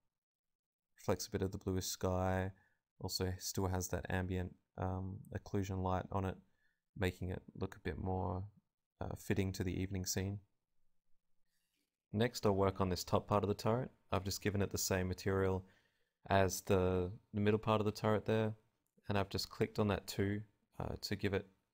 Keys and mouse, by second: 0.3-1.8 right drag, 2.2 click, 4.1-5.1 right drag, 4.4-6.1 drag, 6.1-7.1 right drag, 6.8 g, 7.6-10.0 drag, 7.6-9.0 right drag, 13.7-16.6 drag, 17.0-21.6 drag.